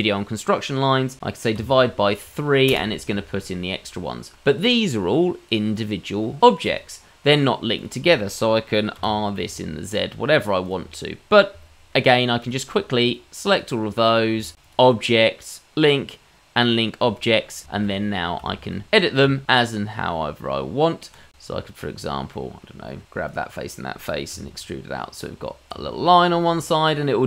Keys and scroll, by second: 9.0 r, 19.6 Tab, 24.7 e, 25.4 Tab.